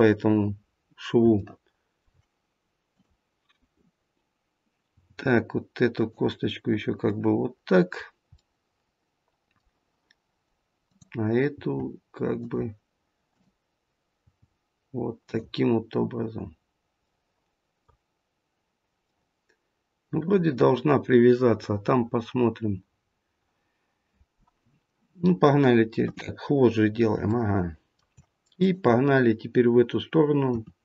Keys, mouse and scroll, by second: 0.7-1.1 scroll down 1, 1.2 shift+middle click, 2.8 click, 4.9 g, 7.0 middle click, 8.3 middle click, 10.7 click, 13.3 click, 13.3 g, 14.3 g, 16.9 middle click, 19.0 middle click, 25.9 KP_3, 26.5-27.1 scroll up 1, 27.3 shift+middle click, 28.5 click, 30.4 e.